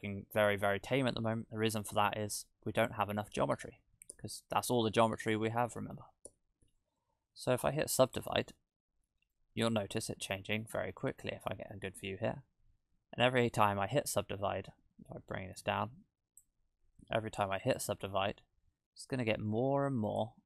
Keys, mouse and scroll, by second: 0.1 middle click, 2.8-3.5 scroll down 5, 4.1 Tab, 4.7-5.2 scroll up 3, 6.3 Tab, 8.1 click, 8.9 scroll up 1, 9.3 middle click, 10.8-11.3 scroll up 1, 15.6 click, 17.7 click, 20.1 click.